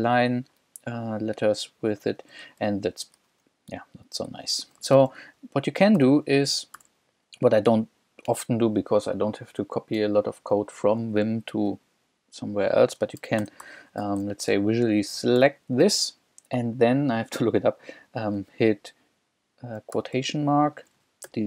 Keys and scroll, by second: 2.1 j, 2.7 k, 4.3 b, 6.8 h, 13.2-14.9 typing, 19.9 shift+', 21.3 shift+8.